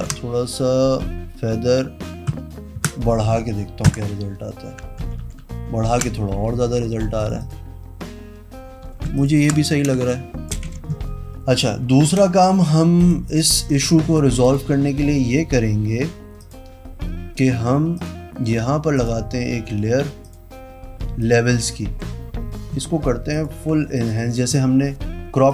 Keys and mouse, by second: 3.0 KP_Enter, 4.0 alt+BackSpace, 5.5 ctrl+KP_Subtract, 6.1 ctrl+d, 7.3 z, 7.6 click, 9.0 z, 9.4 alt+click, 9.6 alt+click, 10.1 space, 10.3 click, 10.8 v, 13.2 click, 14.6 click, 16.6 click, 18.2 click, 19.1 click, 20.4 click, 21.4 click, 23.6 alt+click, 24.1 click.